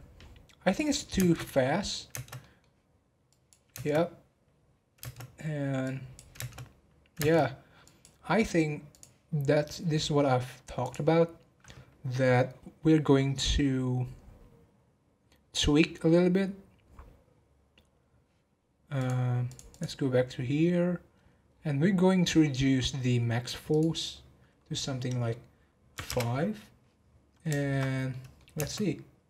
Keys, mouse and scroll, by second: 0.8 click, 1.1 space, 2.1 space, 2.4 middle click, 3.3 click, 3.7 space, 5.0 space, 5.8 click, 6.4 space, 7.1 space, 7.8-12.0 drag, 18.9 click, 19.4 click, 19.7 click, 21.1-21.9 scroll down 12, 23.7-26.7 drag, 27.5-27.9 shift+middle drag, 27.9 scroll up 1, 28.1 middle click, 28.5 space.